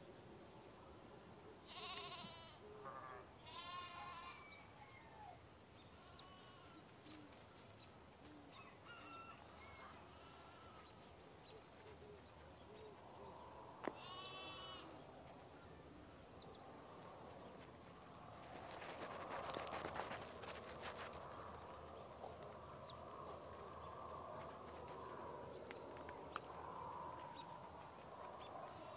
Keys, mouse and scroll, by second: 2.1-6.2 drag, 6.9 ctrl+scroll up 1, 7.0-8.5 scroll down 1, 8.5-9.7 drag, 11.3-12.9 scroll down 1, 12.9 click, 13.2-13.7 scroll down 1, 13.7 click, 14.2-15.2 alt+scroll down 1, 15.2 click, 16.2-17.1 ctrl+scroll down 1, 17.1-22.4 drag, 22.4-22.7 scroll up 1, 23.2 ctrl+z, 24.4-27.6 drag, 27.6-28.9 scroll up 1.